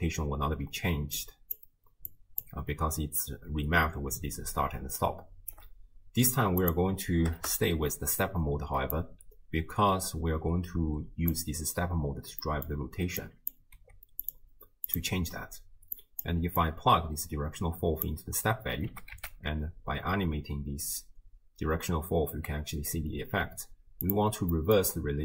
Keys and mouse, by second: 1.0-2.8 d, 1.2 click, 4.8 d, 5.0 right click, 5.6 d, 6.6 click, 9.0-11.3 drag, 12.4 middle click, 13.3 drag, 13.8 g, 14.9 click, 16.0 click, 16.6-18.1 drag, 18.9 g, 24.6 middle click.